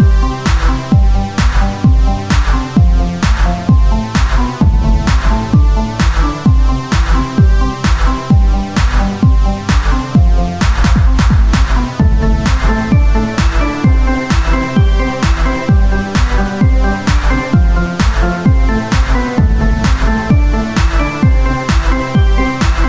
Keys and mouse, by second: 1.4 Tab, 2.5 ctrl+Tab, 5.0 c, 5.0 i, 5.3 ctrl+z, 6.6 Tab, 6.6 ctrl+a, 6.7 Tab, 11.0 w, 11.2 Tab.